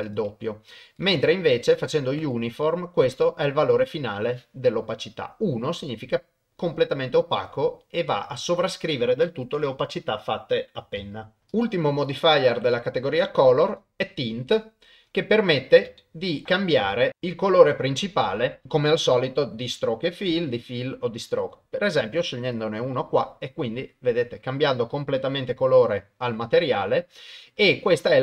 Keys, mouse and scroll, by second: 0.0-1.2 drag, 11.5 click, 12.1-13.8 drag, 16.0 shift+middle click, 18.6-20.2 drag, 21.5 click.